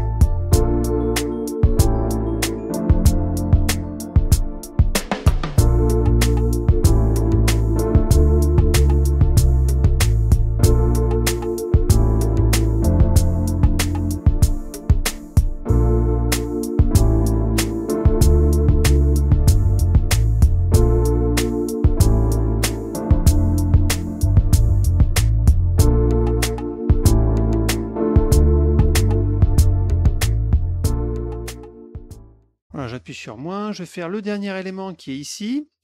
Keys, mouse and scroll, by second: 0.4 click, 0.6 click, 1.0 click, 1.4 click, 1.8 click, 2.1 click, 2.2 middle click, 2.5 click, 2.9 click, 3.2 click, 3.7 click, 4.2 click, 4.6 click, 4.9 click, 5.2 click, 5.5 click, 5.7 click, 6.1 click, 6.3 middle click, 6.7 middle click, 6.8 middle click, 7.4 middle click, 7.6 middle click, 7.8 middle click, 8.0 middle click, 8.3 middle click, 8.7 click, 9.5 click, 9.6 middle click, 9.8 click, 10.3 click, 10.7 click, 11.1 click, 11.3 click, 11.8 click, 12.3 click, 12.6 click, 12.9 click, 13.1 middle click, 13.5 click, 14.0 click, 14.5 click, 14.9 click, 15.2 click, 15.4 middle click, 15.6 click, 16.0 click, 16.2 click, 16.7 click, 17.0 click, 17.1 click, 17.5 click, 17.7 click, 18.0 click, 18.4 click, 18.7 middle click, 18.9 click, 19.6 click, 20.2 click, 20.4 click, 20.7 click, 21.0 click, 21.4 click, 21.5 middle click, 21.9 click, 22.2 middle click, 22.4 click, 22.7 click, 23.0 click, 23.2 click, 23.6 click, 23.9 click, 24.2 click, 24.4 click, 24.5 middle click, 24.7 click, 25.1 click, 25.2 click, 25.5 click, 25.6 click, 26.1 click, 26.6 click, 26.9 middle click, 27.0 F1, 27.2 click, 27.5 click, 27.7 click, 28.0 click, 28.1 ctrl+click, 28.3 middle click, 28.5 click, 28.8 click, 29.0 click, 29.4 click, 29.6 ctrl+click, 29.8 middle click, 30.0 click, 30.4 click, 30.6 click, 31.0 click, 31.0 middle click, 31.2 click, 31.9 F1, 33.2 scroll down 1, 33.4 middle click, 33.8 middle click, 34.3 middle click, 34.5 middle click, 34.8 middle click.